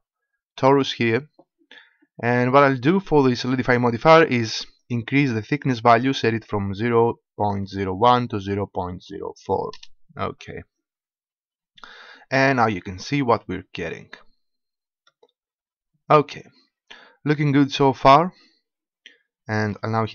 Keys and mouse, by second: 4.9-6.5 drag, 14.1 middle click, 14.7 middle click, 14.9 middle click, 16.3 middle click.